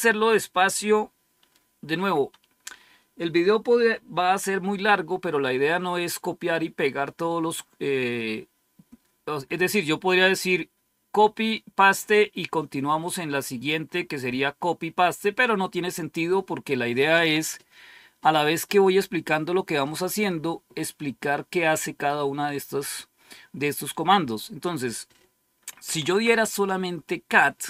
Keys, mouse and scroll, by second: 12.8 scroll down 1, 13.8-14.4 scroll up 1, 15.1-15.7 scroll up 1, 15.7-24.1 scroll up 1, 24.6 click, 25.5-26.6 typing.